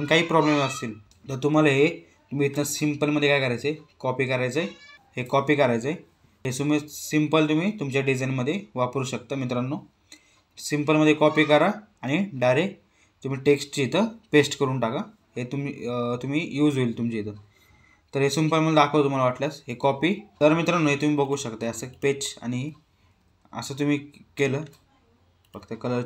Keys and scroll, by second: 19.4 ctrl+c, 23.0 ctrl+v, 24.1 ctrl+a.